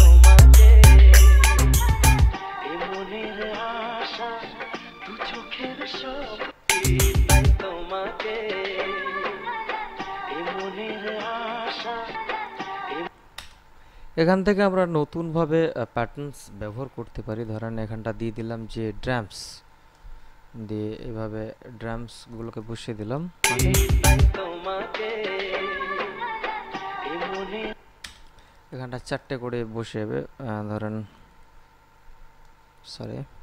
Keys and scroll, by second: 6.7 space, 13.3 space, 23.8 space, 27.8 space.